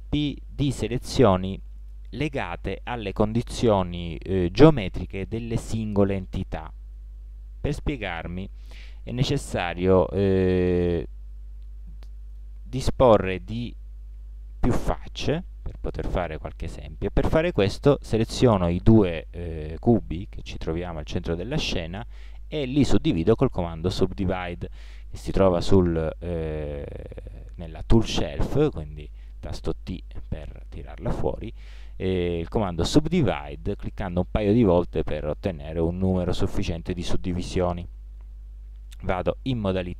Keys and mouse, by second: 14.2 ctrl+l, 20.8 middle click, 29.9 t, 39.2 ctrl+Tab.